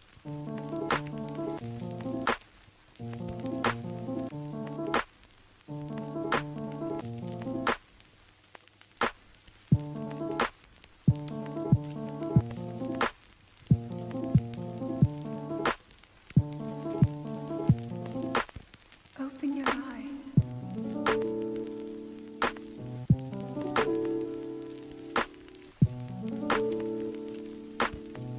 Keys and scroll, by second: 3.8 ], 6.5 [, 11.5 ctrl+z, 11.9 ctrl+z, 12.6 ctrl+z, 14.2 ctrl+z, 18.5 ctrl+z.